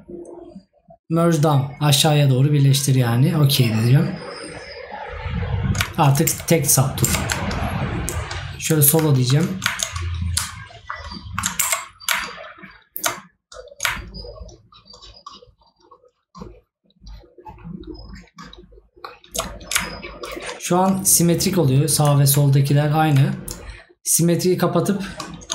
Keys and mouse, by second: 9.2 right click, 11.1 right click.